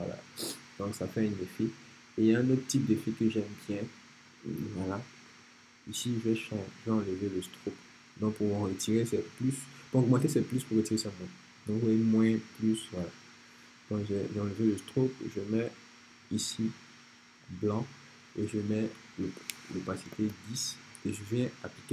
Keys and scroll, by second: 19.3-20.2 typing.